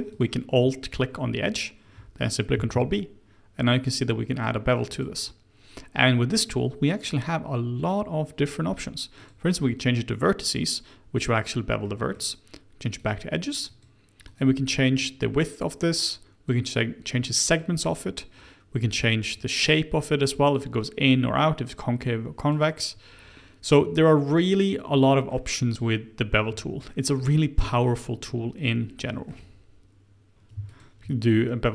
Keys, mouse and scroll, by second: 0.1 alt+click, 2.5 ctrl+b, 9.1 click, 11.8-12.9 middle drag, 12.9 click, 13.6 click, 14.9-22.4 drag, 24.9 middle click, 25.5-26.1 scroll up 2, 26.9-30.3 shift+middle drag, 30.7 alt+click.